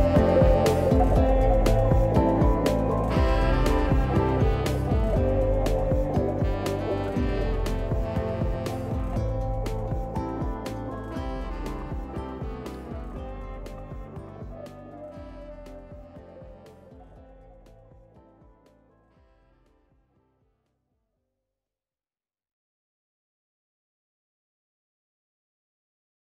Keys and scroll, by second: 9.0 F10, 13.7 ctrl+d, 20.4-25.2 typing.